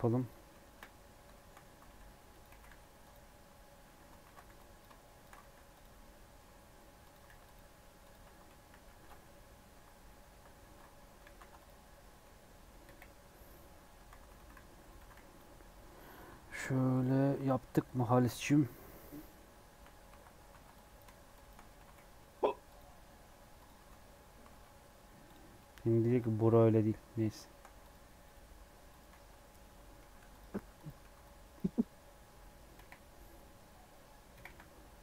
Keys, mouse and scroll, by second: 0.4-1.2 scroll up 6, 0.5 shift+middle click, 1.2 shift+middle click, 1.6 s, 2.4 g, 3.6-3.9 scroll down 1, 3.9 Tab, 4.1 alt+z, 4.4 3, 4.5 click, 5.1 shift+click, 5.4 alt+e, 7.3 alt+e, 8.1 Tab, 8.5 ctrl+1, 9.2 middle click, 9.9 ctrl+2, 10.3 ctrl+2, 10.6 ctrl+3, 11.2 ctrl+a, 11.8 Tab, 12.0 middle click, 12.8-14.9 typing, 16.5 ctrl+r, 18.4 KP_7, 19.3-19.7 scroll up 3, 19.7 1, 20.1 alt+z, 20.5 alt+z, 20.7 Left, 21.3 shift+click, 21.8 g, 23.5 click, 23.7 Tab, 24.2 scroll down 4, 24.5 alt+z, 25.2 click, 25.4 scroll down 1, 25.5-27.2 middle drag, 27.2 scroll up 2, 27.4 shift+middle click, 27.8 click, 28.2 right click, 29.2 Tab, 30.1 3, 30.3 click, 31.0 alt+z, 31.2 click, 31.7 middle click, 32.2 scroll up 1, 32.7 KP_1, 33.7-34.3 scroll up 1, 34.3 KP_1, 34.4 KP_9.